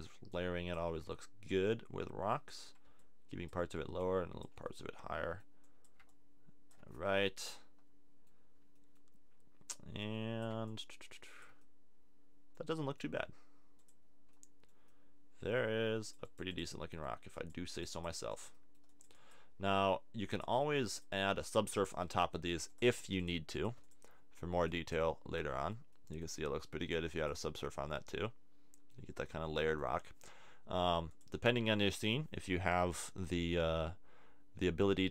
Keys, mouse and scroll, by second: 4.5-6.9 middle drag, 6.9 click, 7.1 middle click, 21.3 middle click, 25.2 middle click, 27.7 middle click, 28.5 click, 29.3-31.1 middle drag, 31.1-34.8 drag.